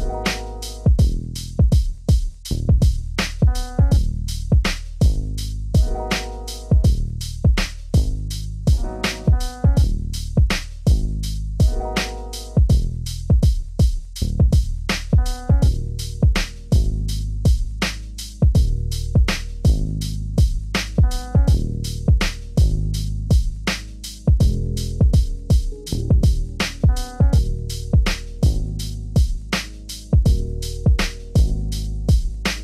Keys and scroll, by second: 9.8 ctrl+space, 21.5 shift+F6, 23.7 alt+BackSpace, 24.8 ctrl+z, 25.2 alt+BackSpace, 26.5 ctrl+z, 26.9 ctrl+BackSpace, 28.2 ctrl+d.